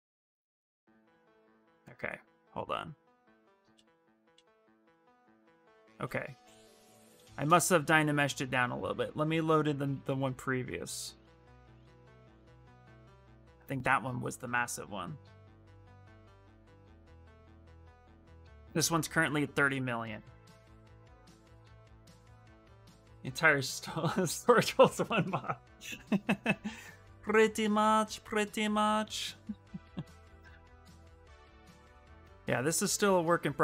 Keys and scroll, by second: 2.4 f, 3.4 f, 7.5 shift+f, 8.6 shift+f.